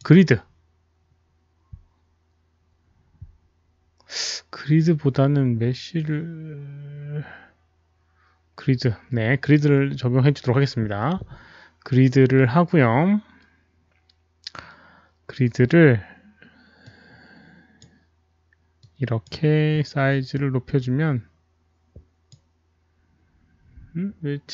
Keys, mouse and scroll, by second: 5.9 click, 9.4 click, 16.8-17.7 drag, 18.9 click, 20.4-22.2 drag.